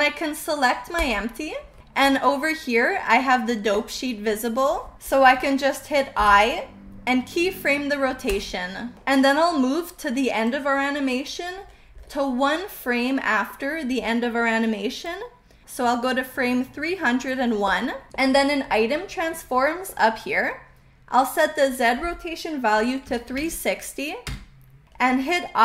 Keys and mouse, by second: 6.8 i, 10.5-11.3 drag, 12.4-13.5 middle drag, 15.1 click, 15.4 middle click, 21.8-24.7 drag.